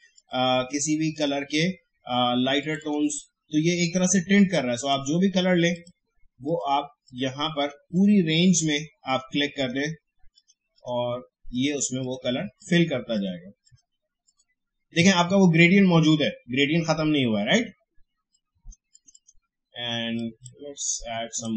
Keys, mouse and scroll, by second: 18.3-21.5 drag.